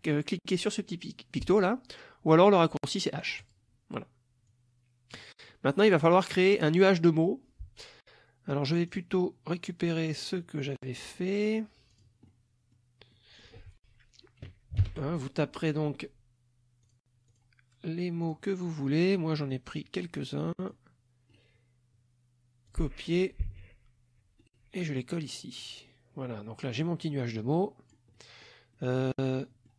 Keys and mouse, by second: 3.4 click, 4.5 click, 5.5 middle click, 8.9 click, 11.3 click, 11.9 click, 12.3 middle click, 13.2 middle click, 14.9 ctrl+shift+l, 16.9 click, 17.3 click, 18.3 click, 18.9 middle click, 19.3 middle click, 20.2 click, 21.3 right click, 22.7 click, 23.6 alt+Tab, 24.5 right click, 25.6 click, 26.8-28.1 drag, 28.2 middle click, 28.8 middle click, 29.3 middle click.